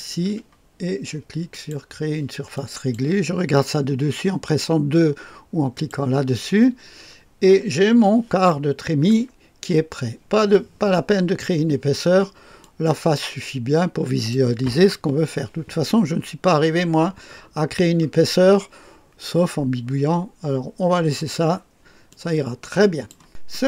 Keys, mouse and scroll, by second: 1.4 click, 2.5 click, 5.7 click, 7.1-7.8 scroll up 2, 7.8-8.4 scroll down 2, 8.4 click, 9.1 right click, 12.5-14.7 drag, 14.9 KP_2, 22.0-23.5 drag.